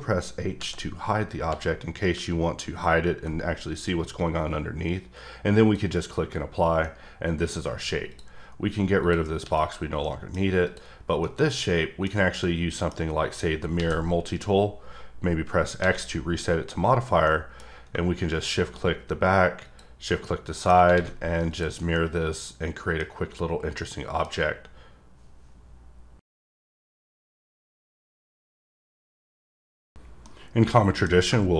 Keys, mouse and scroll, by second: 5.6 click, 6.8 middle click, 8.1 click, 9.0 click, 9.6 click, 10.0 middle click, 10.6 click, 11.2 middle click, 12.4 middle click, 17.3 middle click, 18.3 click, 19.6 click, 20.2 middle click, 21.5 click, 21.9 middle click, 23.1 scroll up 1, 23.7 middle click.